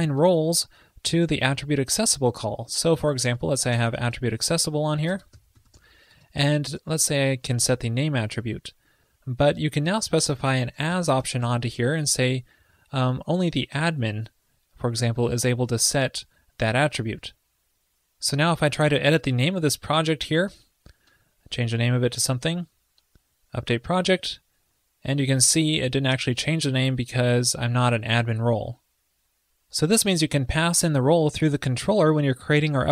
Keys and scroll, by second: 11.5 ctrl+l, 17.2 super+s.